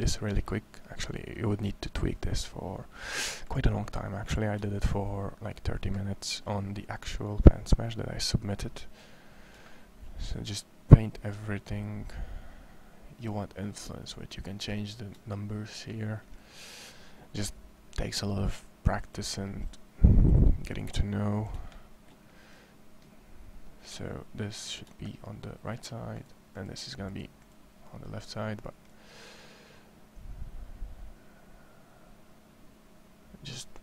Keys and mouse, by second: 1.5-2.4 drag, 2.4-2.9 middle drag, 3.3-4.6 drag, 4.6 middle click, 6.7-8.0 drag, 8.7-10.3 middle drag, 17.0 middle click, 18.1 middle click, 19.1 middle click, 27.4-28.9 right drag, 28.9-30.6 middle drag.